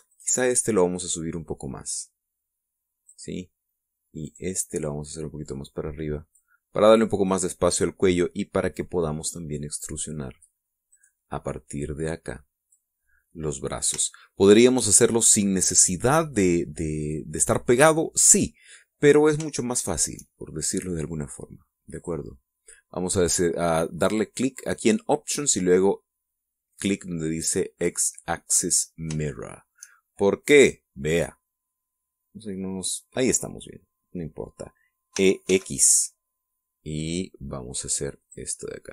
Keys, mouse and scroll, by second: 0.8 right click, 2.1-4.0 drag, 5.0 right click, 5.8-7.2 drag, 7.2 middle click, 8.0 right click, 8.3 middle click, 8.5-11.4 drag, 11.6 middle click, 12.2-13.6 drag, 14.2-14.6 scroll up 1, 14.6-14.9 scroll down 1, 14.9 shift+middle click, 19.3-20.1 scroll down 1, 20.1-20.5 shift+scroll down 1, 20.5 shift+middle click, 21.0 shift+scroll down 1, 21.1 shift+middle click, 22.7 click, 27.4 click, 30.2 shift+middle click, 31.1 middle click, 32.6-34.0 middle drag, 34.2-35.4 middle drag, 35.9 e, 36.2 x.